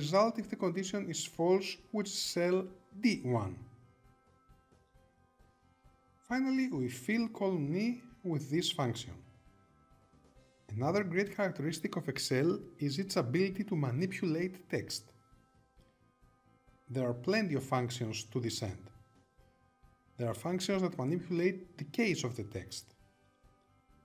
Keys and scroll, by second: 4.0 Return.